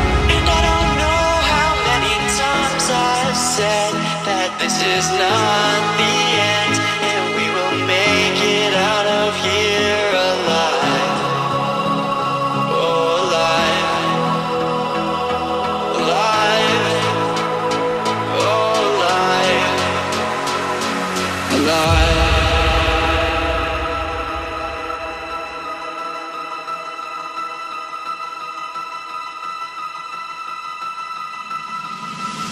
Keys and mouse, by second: 0.0 ctrl+-, 0.4 space, 0.5 click, 0.7 space, 2.8 ctrl+-, 3.2 space, 3.4 click, 3.5 space, 3.8 click, 4.2 space, 4.5 click, 4.5 space, 5.2 click, 8.3 ctrl+c, 8.8 click, 13.8 ctrl+a, 14.6 click, 17.7 ctrl+c, 18.5 click, 22.9 ctrl+a, 23.7-30.2 drag.